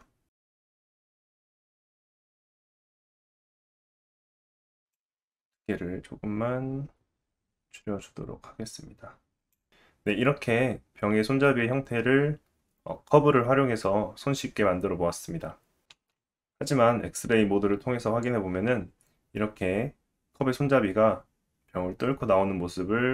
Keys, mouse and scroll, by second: 0.2-2.5 drag, 0.4-3.5 typing, 2.5 middle click, 2.6 click, 2.9 middle click, 2.9 Tab, 3.0 scroll down 1, 3.1 scroll up 2, 3.2 Tab, 3.3 click, 3.7 Tab, 3.8 alt+z, 4.9-9.7 drag, 15.8 Tab, 15.9 alt+z, 16.2-23.1 middle drag.